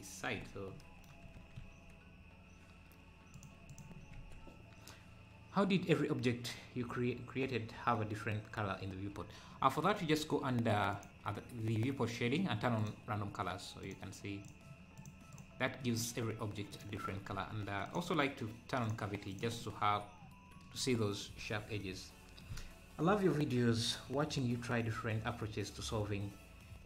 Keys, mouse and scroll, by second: 1.2 g, 3.7 click, 4.2 ctrl+s, 10.9-13.9 drag, 16.7 click, 17.4 ctrl+s, 17.9-19.6 drag, 20.8-21.3 scroll up 1, 21.4 ctrl+s.